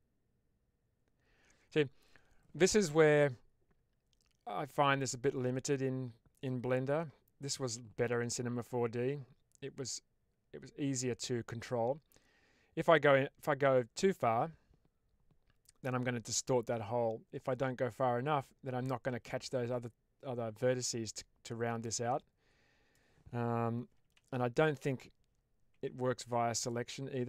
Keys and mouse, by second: 24.1 ctrl+z, 26.5 click.